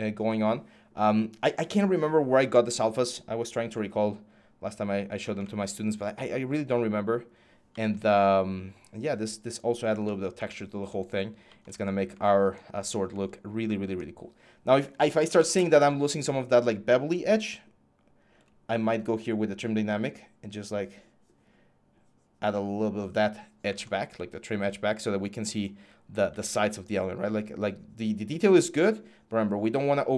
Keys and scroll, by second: 14.5-15.7 typing.